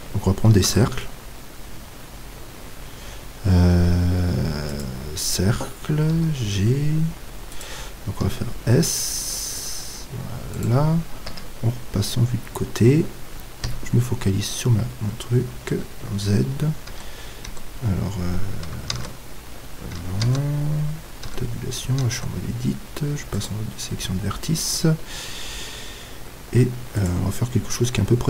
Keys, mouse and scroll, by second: 0.7 shift+a, 6.1 g, 7.6-9.5 drag, 8.3 s, 10.6-12.5 drag, 11.3 KP_3, 13.6 KP_Decimal, 14.6-15.8 middle drag, 15.8 z, 16.8 click, 16.9 Tab, 19.0 Tab, 21.2 Tab, 22.1 ctrl+Tab, 25.6-27.3 middle drag.